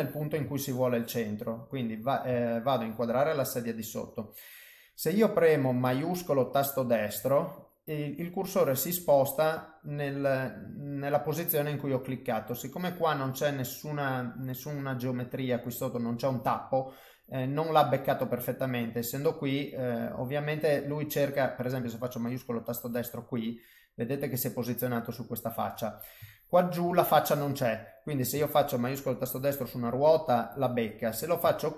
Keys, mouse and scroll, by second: 0.5 ctrl+middle click, 1.3 middle click, 2.4 shift+middle click, 3.2 middle click, 6.5 shift+right click, 8.8 middle click, 13.4 middle click, 14.9 middle click, 16.5 middle click, 17.9 middle click, 19.5 middle click, 22.4 shift+right click, 23.2 middle click, 24.8 middle click, 26.3 ctrl+middle click, 29.0 shift+right click, 29.6 middle click.